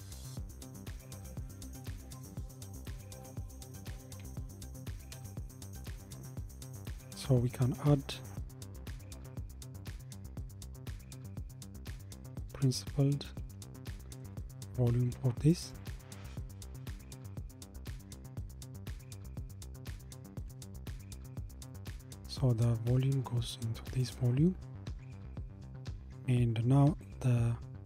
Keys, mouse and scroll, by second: 8.8 shift+a, 18.0-19.3 scroll up 2, 19.5 click, 20.5 g, 23.1 click.